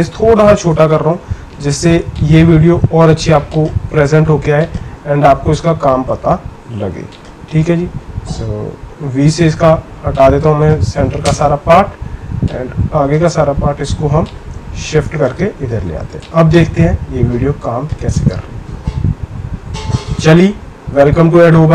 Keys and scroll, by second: 0.7 c, 9.0 v, 11.2 BackSpace.